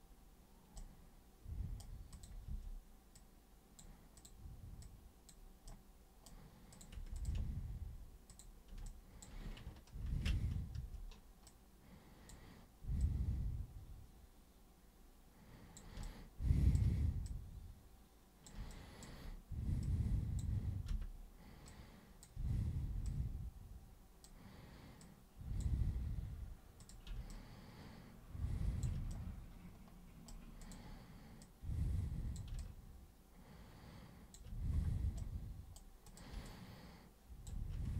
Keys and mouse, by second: 0.7-1.7 super+right drag, 2.1 super+click, 2.4 super+w, 3.1 super+click, 4.1 super+click, 4.8 super+click, 5.6 super+right click, 6.7 super+click, 7.2 ctrl+shift+super+click, 8.3 super+click, 8.8-9.2 alt+super+drag, 10.0 ctrl+super+e, 10.7 super+w, 11.5-12.2 super+drag, 13.0-15.7 super+drag, 16.0-16.7 alt+super+drag, 17.3-18.4 super+drag, 18.7 alt+super+click, 19.8 super+click, 20.9 super+r, 21.7-22.2 super+drag, 22.3 super+w, 23.0 super+click, 25.0 super+click, 26.8 super+click, 27.3-28.8 alt+super+drag, 29.1-30.3 super+right drag, 30.6 super+click, 31.3 super+click, 32.6-34.3 alt+super+drag, 35.1 super+right click, 36.0 super+click, 36.4-37.4 alt+super+drag.